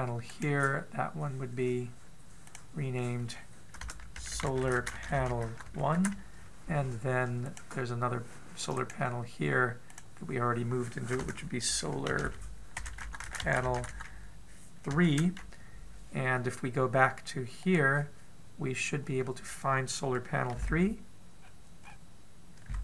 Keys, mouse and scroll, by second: 0.1 click, 0.9 right click, 8.0 click, 9.3 right click, 18.3 click, 19.7-21.1 scroll down 1, 21.1 scroll down 1, 21.1 KP_Decimal, 22.0-22.8 scroll down 2, 22.4-22.8 scroll up 2.